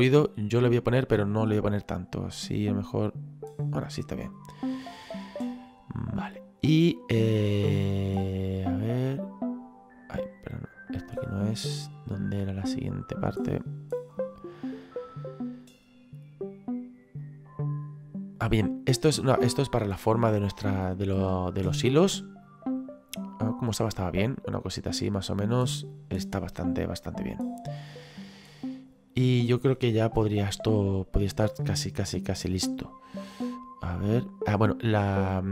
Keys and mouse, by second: 1.3 click, 2.9 click, 4.5 middle click, 8.5 click, 12.2 middle click, 15.0 middle click, 17.2 click, 22.4 click, 31.1 middle click, 33.6 click.